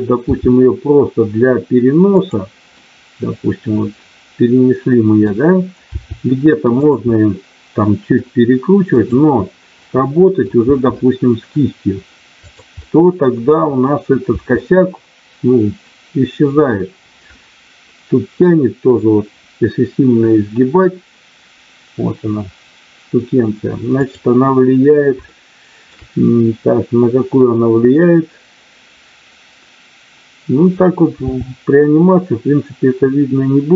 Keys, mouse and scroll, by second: 0.3 g, 2.8-5.9 middle drag, 5.9 r, 7.0 middle click, 8.9 click, 9.8 middle click, 10.6 r, 12.8 middle click, 14.3 r, 25.3 shift+middle click, 31.2 r.